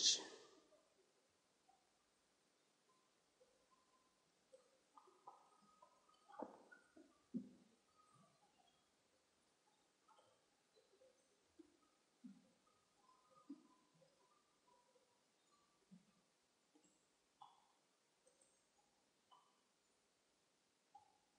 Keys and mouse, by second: 0.5 Tab, 2.0 a, 2.2 a, 3.5 u, 8.2 KP_0, 10.4-13.3 drag, 11.8-14.1 right drag, 13.3 ctrl+l, 16.2 u.